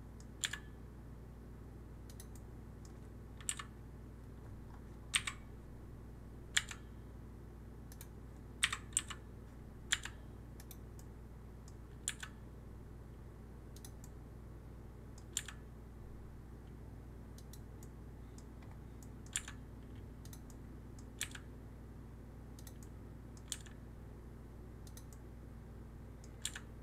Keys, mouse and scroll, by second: 0.3 g, 2.2-3.4 middle drag, 3.4 KP_3, 4.5 scroll up 2, 5.0 KP_1, 6.4 g, 8.5 KP_1, 9.8 g, 10.8-12.0 middle drag, 12.0 g, 13.9-15.2 middle drag, 15.2 g, 17.7-19.2 middle drag, 19.2 g, 20.3-21.1 middle drag, 21.1 g, 22.7-23.4 middle drag, 23.4 g, 25.0-26.3 middle drag, 26.3 g.